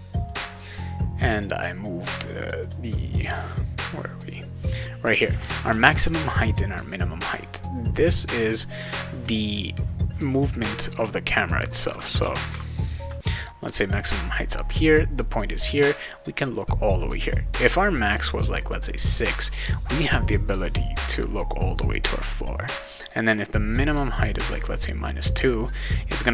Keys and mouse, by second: 0.3 click, 1.1 click, 2.6 click, 3.4 click, 3.9 click, 7.9 click, 12.2-13.1 right drag, 12.2 s, 12.5 d.